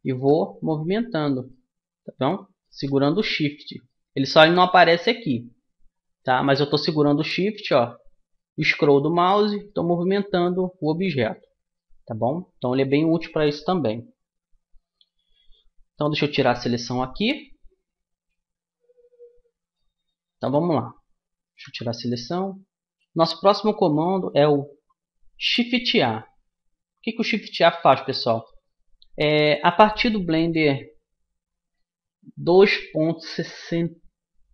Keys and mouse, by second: 2.0-11.8 middle drag, 16.7 a, 19.4 Tab, 28.8-33.4 middle drag.